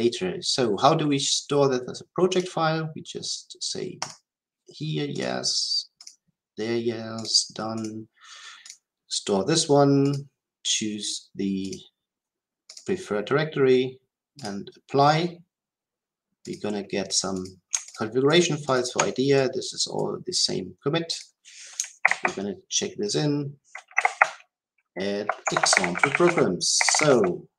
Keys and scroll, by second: 22.0 ctrl+k.